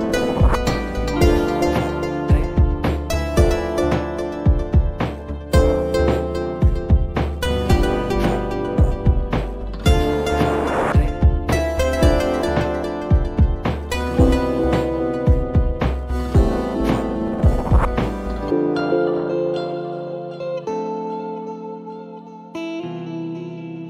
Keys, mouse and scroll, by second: 0.2-1.3 middle drag, 1.3-3.0 scroll up 1, 3.0-5.5 drag, 5.5 Tab, 6.6 ctrl+r, 9.3 middle click, 10.1-10.8 scroll up 2, 11.4 ctrl+click, 11.9 ctrl+r, 13.3-14.9 middle drag, 14.9 ctrl+click, 15.5 ctrl+r, 17.9 Tab, 20.1-23.0 drag.